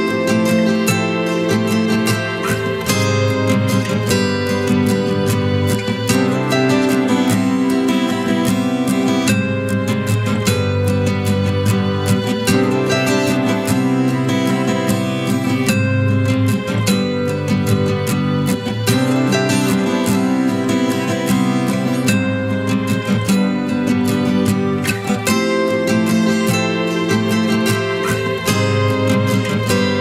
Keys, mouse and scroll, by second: 0.2-0.9 typing, 1.2 double click, 2.7 typing, 3.8 typing, 5.6 typing, 6.9 ctrl+=, 7.0 ctrl+=, 7.4-7.8 typing, 8.0 double click, 14.1 double click, 15.5 double click, 16.7 ctrl+-, 16.9 ctrl+-.